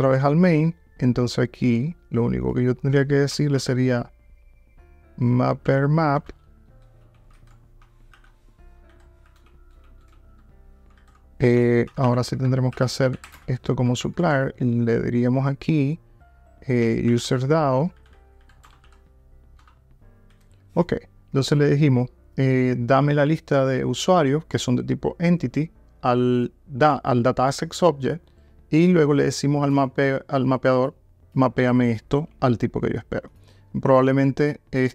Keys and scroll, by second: 5.3 Return, 9.4 alt+BackSpace, 18.7 Return.